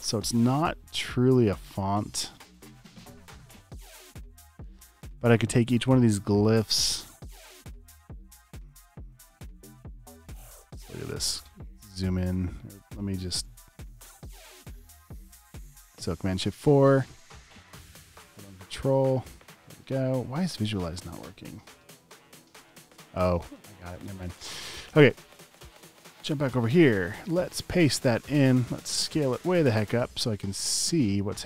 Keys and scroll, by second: 22.7 space, 27.7 super+v, 28.3 e.